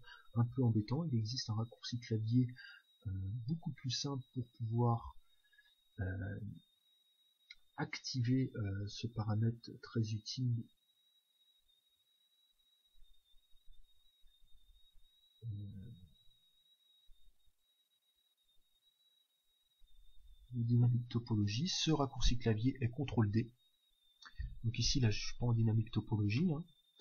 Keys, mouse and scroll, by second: 1.4 click, 25.0-27.0 drag, 26.4-27.0 middle drag.